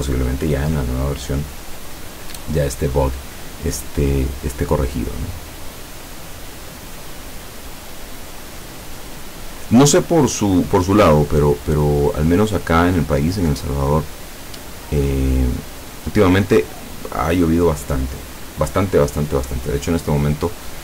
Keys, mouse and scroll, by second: 7.9 click, 11.9-12.7 drag, 15.7 click.